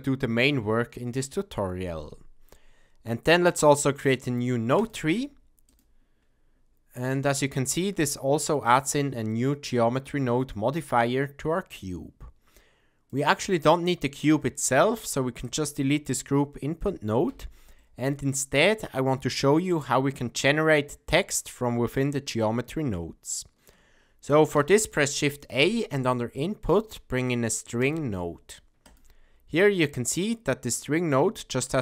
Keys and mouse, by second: 5.7-6.5 drag, 8.4 click, 11.0-13.1 drag, 14.9 middle click, 15.4 click, 17.3 x, 17.8-18.8 middle drag, 24.5 shift+a, 29.8 middle click, 31.6-31.8 drag.